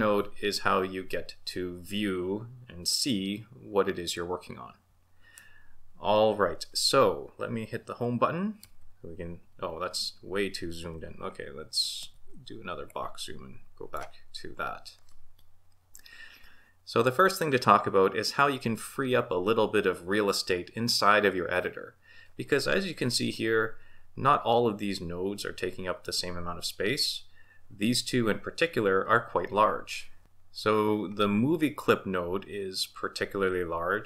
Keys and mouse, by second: 8.6 Home, 12.0 shift+b.